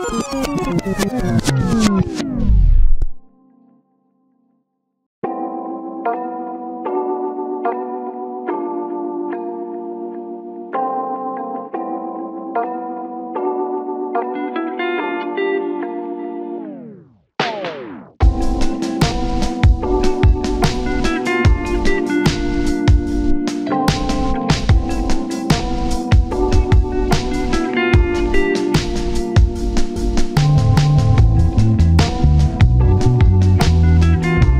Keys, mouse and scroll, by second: 1.4 scroll down 1, 3.2 alt+z, 3.4 scroll down 1, 4.1-4.6 scroll up 1, 4.6 shift+click, 6.0 double click, 9.0 shift+click, 9.3-12.1 typing, 13.4 scroll up 1, 13.6 typing, 18.0 typing, 19.9 typing, 21.0 scroll down 1, 21.2-23.1 typing, 22.7-23.1 scroll up 1, 24.1 scroll down 1, 24.3-25.2 typing, 25.0 scroll up 1, 25.7 double click, 32.6-33.0 scroll down 1, 33.0-33.8 typing, 33.4-33.8 scroll up 1, 33.9 shift+click.